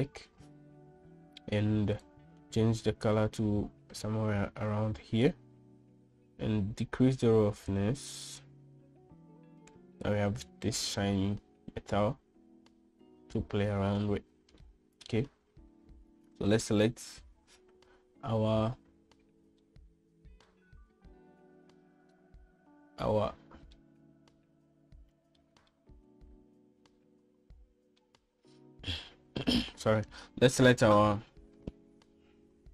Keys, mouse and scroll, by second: 0.0 click, 2.9 click, 8.7-11.1 drag, 15.6 middle click, 17.5 click, 20.6-21.5 middle drag, 24.7-26.3 middle drag, 26.7-28.9 middle drag, 31.0 middle click.